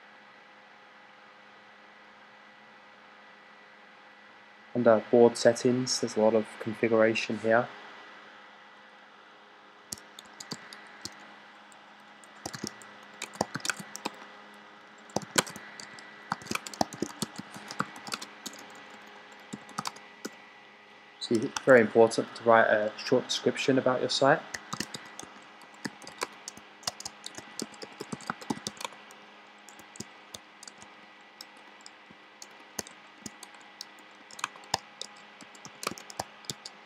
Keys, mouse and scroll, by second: 10.1 shift+s, 10.4 shift+r, 12.4-20.1 typing, 22.4-23.2 typing, 24.6-29.0 typing, 30.5-36.8 typing.